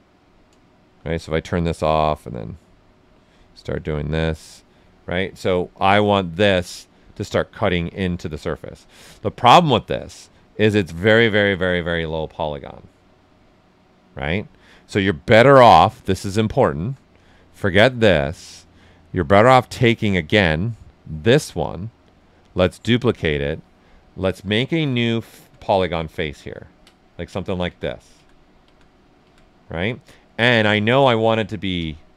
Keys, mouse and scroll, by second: 0.8 shift+f, 2.3-5.9 drag, 5.9 ctrl+right click, 7.6 shift+f, 10.8 click, 11.8-15.3 right drag, 15.3-22.7 drag, 24.2-26.3 alt+drag, 26.3 ctrl+right click, 27.2-30.0 alt+drag, 30.0 right click, 31.7 space.